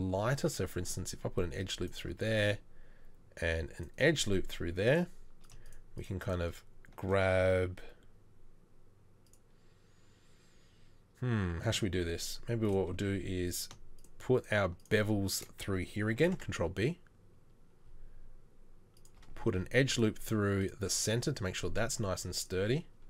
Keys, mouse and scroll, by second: 0.8 ctrl+r, 2.2 ctrl+r, 16.2 ctrl+b, 19.5 ctrl+r.